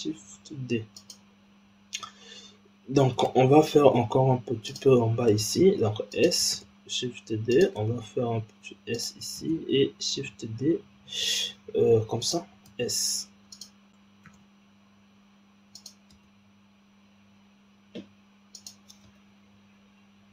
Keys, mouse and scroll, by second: 3.1 shift+d, 5.3 s, 6.5 shift+d, 7.7 s, 9.3 shift+d, 12.6 s, 14.2 shift+d, 16.1 s, 19.0 g.